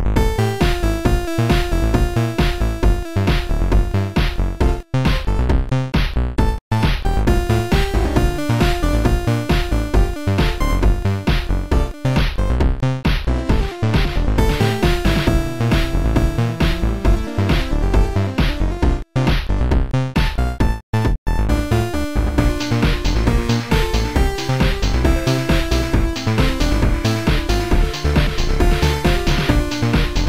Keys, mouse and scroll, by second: 0.0 click, 0.0 right click, 1.6 click, 2.4 click, 6.5 click, 7.4 click, 8.7 click, 9.3 click, 15.7 click, 15.9 click, 17.6 click, 18.1 click, 19.0 click, 21.7 click, 23.5 click, 24.4 click, 27.6 click, 29.0 click, 29.2 click, 29.7 click.